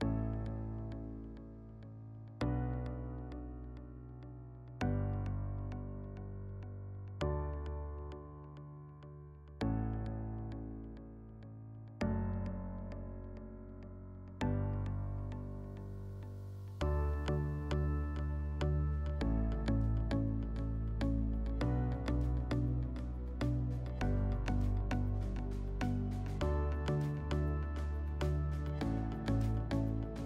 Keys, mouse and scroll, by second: 18.2-18.6 drag, 19.3 click, 20.6-24.5 drag, 26.4 click, 26.6 click, 27.5 click, 28.7 click.